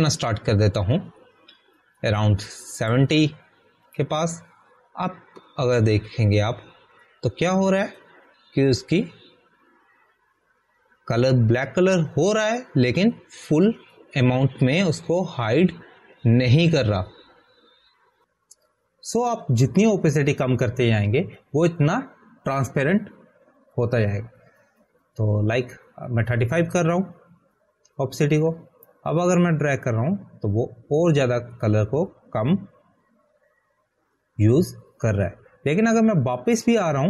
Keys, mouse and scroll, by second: 0.6 click, 1.8 click, 31.3 ctrl+z, 31.4 click.